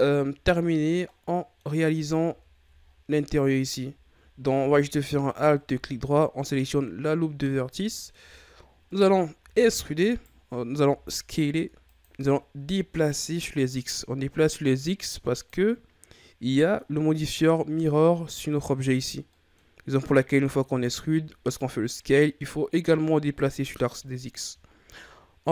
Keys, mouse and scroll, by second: 1.0-1.8 middle drag, 1.8-2.2 scroll up 5, 2.2 Tab, 2.7-3.9 scroll up 6, 3.9-5.2 scroll up 3, 5.2 alt+right click, 5.8-6.5 scroll down 2, 6.5-8.2 middle drag, 8.2 shift+scroll up 2, 8.8 middle click, 9.4 e, 10.7 s, 12.1-12.9 ctrl+scroll down 3, 13.1-15.7 drag, 15.7-16.0 scroll down 3, 16.0-18.2 middle drag, 18.2-19.2 scroll down 2, 19.2 middle click, 19.7-20.2 scroll up 4, 20.4-21.0 scroll up 1, 21.0-23.6 ctrl+scroll up 1, 25.3-25.5 scroll down 2.